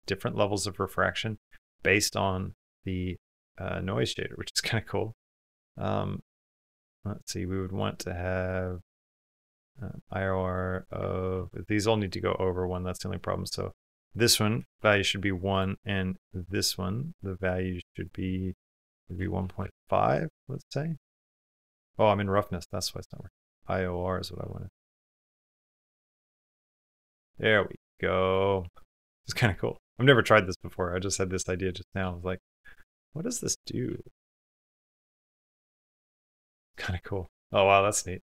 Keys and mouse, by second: 0.2 middle click, 2.7 click, 3.0 click, 3.3 click, 4.8-6.4 drag, 6.7 click, 7.5 click, 8.6 click, 10.2 click, 10.5 click, 21.4 g, 25.0 middle click, 26.7 click, 27.0 click, 28.1 click, 29.3 middle click, 31.3 middle click, 32.3-33.6 middle drag, 33.8 shift+middle click, 36.4 middle click, 36.9 middle click, 37.2 click.